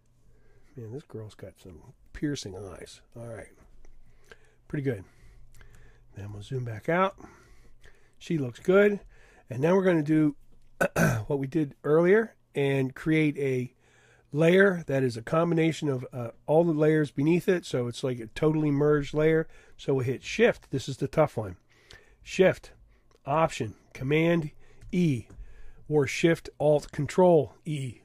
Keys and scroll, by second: 6.3 super+0, 24.8 alt+shift+super+e.